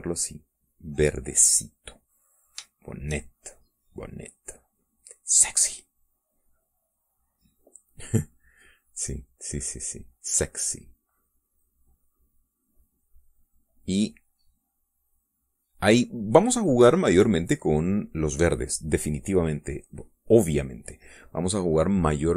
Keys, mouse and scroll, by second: 1.4-2.5 drag, 2.7 click, 3.2 shift+click, 3.8-5.0 shift+drag, 5.2 middle click, 6.8-7.8 middle drag, 8.9 middle click, 9.8-12.3 drag, 12.4-14.6 drag, 15.1-16.4 drag, 16.5 middle click, 18.6-20.2 middle drag, 21.0 middle click.